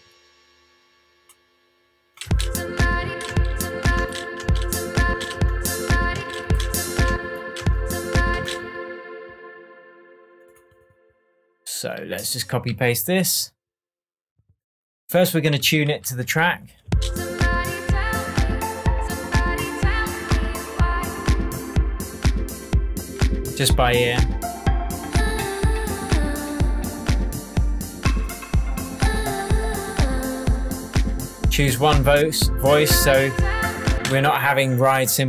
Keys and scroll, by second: 2.2 space, 12.7 super+d, 15.6 super+d, 16.3 shift+super+d, 16.4 shift+super+Tab, 16.8 shift+space, 33.9 space.